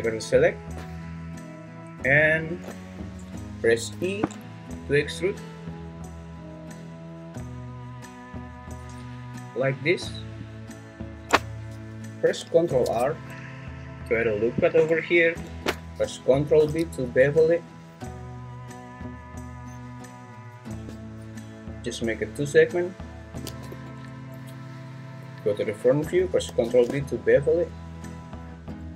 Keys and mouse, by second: 3.9 e, 12.7 ctrl+r, 15.4 Escape, 16.6 ctrl+b, 23.7 Escape, 25.2 `, 26.5 ctrl+b.